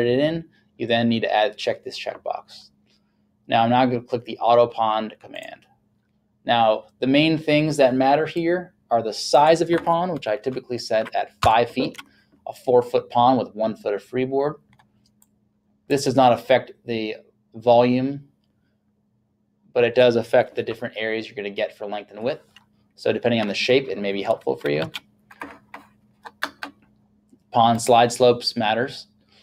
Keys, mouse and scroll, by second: 5.4 click, 8.4 click, 11.4 KP_5, 11.9 Tab, 15.2 click, 24.9 KP_3, 27.8 click.